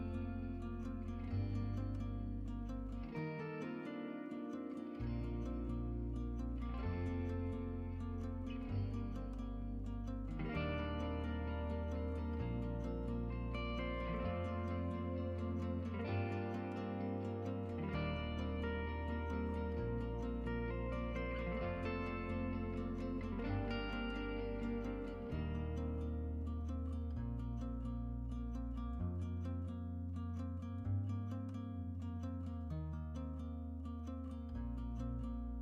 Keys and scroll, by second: 1.6-3.6 typing, 8.0-8.8 typing, 17.2-18.5 typing, 20.8-21.5 typing.